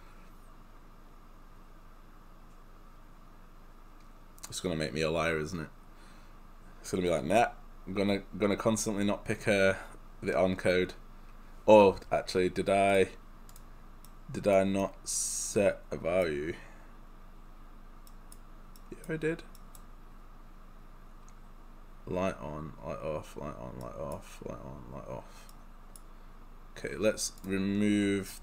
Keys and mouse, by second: 13.0 click, 14.1 right click, 23.9 right click, 27.5 click.